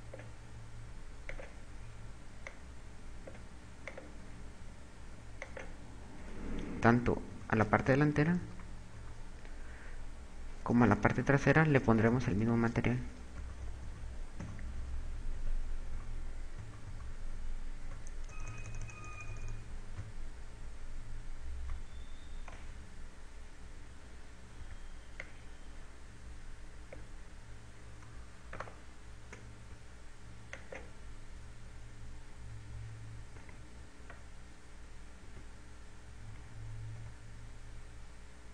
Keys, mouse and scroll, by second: 1.9 click, 5.8 click, 7.2-10.1 typing, 11.7 KP_2, 11.9 KP_2, 12.5 KP_4, 14.2-18.1 typing, 18.7 KP_Add, 19.2 KP_Add, 19.5 KP_Add, 19.7 KP_Add, 20.1 KP_Add, 20.4-24.0 ctrl+KP_2, 25.1 b, 28.9 shift+right click, 31.3 click, 33.3 Tab, 34.5 z, 35.8 Tab, 36.9 Tab.